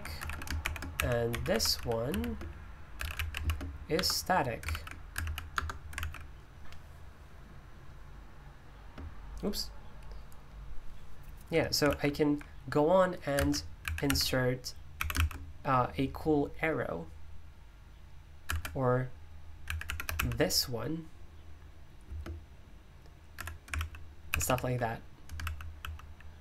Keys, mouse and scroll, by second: 0.1 Escape, 0.2-3.8 typing, 3.9 Return, 4.7 super+l, 5.2 ctrl+v, 5.5 Return, 6.0 super+l, 8.1-8.7 space, 9.0 space, 11.8 super+l, 13.5-15.4 typing, 19.6-20.6 typing, 22.0 typing, 23.1-26.4 typing.